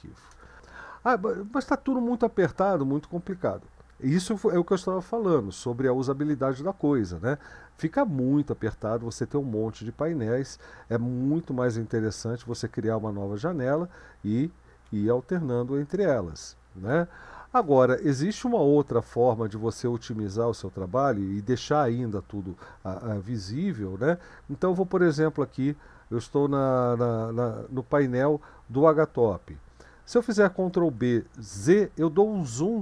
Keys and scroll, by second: 0.3 Return, 12.2 ctrl+b, 12.5 c, 14.8 ctrl+b, 15.3 n, 24.1 ctrl+b, 24.9 Right, 30.7 ctrl+b, 31.6 z.